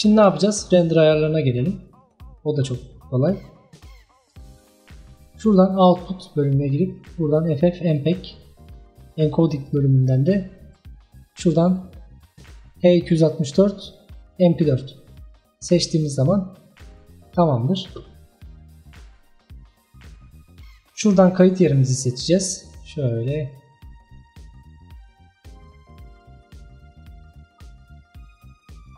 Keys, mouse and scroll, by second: 4.2 click, 5.9 click, 6.7 click, 8.0-9.7 drag, 10.7-15.2 drag, 21.5 click.